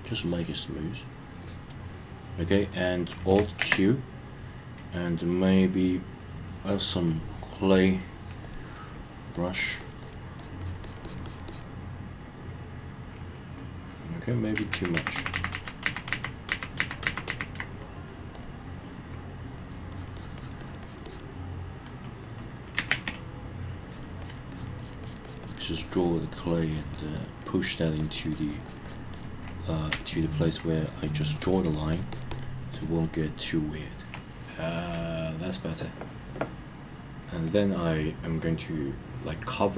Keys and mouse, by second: 0.1 click, 1.4 click, 3.6 alt+q, 7.1 click, 8.5 click, 9.4 click, 9.6 click, 9.8 click, 10.0 click, 10.4 click, 10.6 click, 10.8 click, 11.1 click, 11.3 click, 11.5 click, 14.7 super+z, 15.0 super+z, 18.4 click, 19.7 click, 19.9 click, 20.2 click, 20.4 click, 20.6 click, 20.8 click, 21.1 click, 22.9 alt+q, 23.8 click, 24.2 click, 24.5 click, 24.8 click, 25.0 click, 25.3 click, 25.4 click, 25.6 click, 25.8 click, 26.0 click, 26.3 click, 26.6 click, 26.8 click, 26.9 click, 27.2 click, 27.3 click, 27.6 click, 27.8 click, 28.0 click, 28.2 click, 28.3 click, 28.5 click, 28.7 click, 28.9 click, 29.1 click, 30.0 alt+middle click, 30.8 click, 31.0 click, 31.2 click, 31.4 click, 31.5 click, 31.7 click, 31.9 click, 32.1 click, 32.3 click, 32.9 click, 33.0 click, 33.1 click, 37.5-39.2 drag.